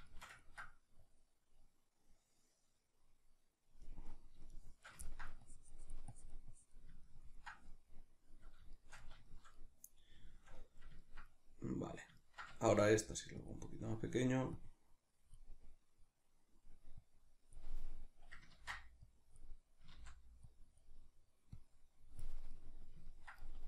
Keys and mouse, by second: 1.0-4.1 drag, 4.1-5.4 middle drag, 5.4-7.1 drag, 7.1-13.5 ctrl+middle drag, 12.8 f, 13.5 click, 15.7-17.0 middle drag, 17.0-22.5 drag, 18.5 ctrl+z, 19.9 ctrl+z, 22.5-23.6 middle drag.